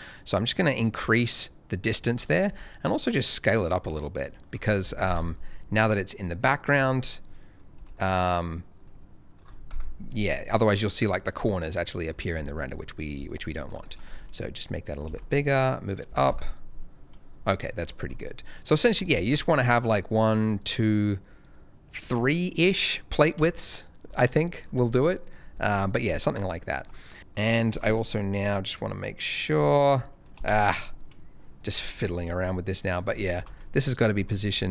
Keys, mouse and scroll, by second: 2.3 shift+middle click, 2.4 s, 4.1 click, 5.0 KP_0, 5.7-6.5 scroll, 6.5 middle click, 6.7-7.1 scroll down 1, 7.1 middle click, 7.7 g, 7.8 middle click, 8.4 click, 8.8 middle click, 9.6 KP_0, 11.9 middle click, 12.1 scroll down 1, 12.4 middle click, 12.8-13.2 scroll down 1, 13.2 click, 13.7 click, 13.7 shift+click, 14.0 s, 14.8 click, 15.0 g, 15.1 z, 15.7 click, 16.2 KP_0, 17.6 middle click, 17.8-18.2 scroll down 1, 18.2 middle click, 19.1 ctrl+shift+a, 19.7 click, 23.3 Escape, 24.0-24.4 scroll up 1, 24.4 middle click, 24.6 scroll down 1, 24.9 middle click, 25.5 click, 25.8-26.1 scroll up 1, 26.1 middle click, 26.5 shift+middle click, 26.9 shift+middle click, 27.7 g, 27.8 z, 29.3 right click, 30.3 g, 31.5 click, 31.8-32.1 scroll down 1, 32.1 scroll up 1, 32.4 click, 33.1 scroll up 1, 33.3 g, 34.0 click, 34.2 middle click, 34.5-34.7 scroll up 2.